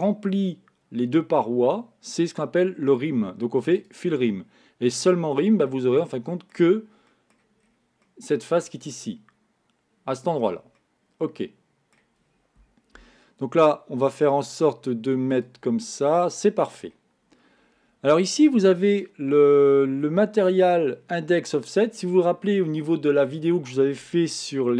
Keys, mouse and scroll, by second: 3.8-5.6 drag, 5.7 middle click, 6.6-7.0 scroll up 1, 7.0 scroll down 1, 7.1 middle click, 7.5 scroll up 1, 7.6 scroll down 4, 8.1-13.9 middle drag, 15.5 click, 16.0-19.1 middle drag.